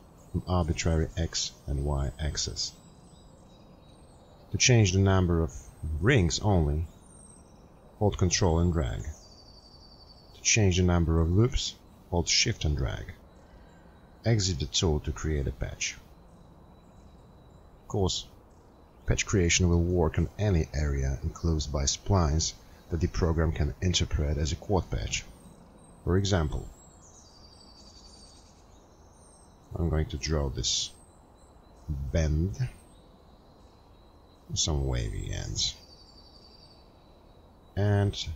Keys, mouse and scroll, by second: 6.8 ctrl+scroll, 7.0-8.3 scroll, 16.1 scroll.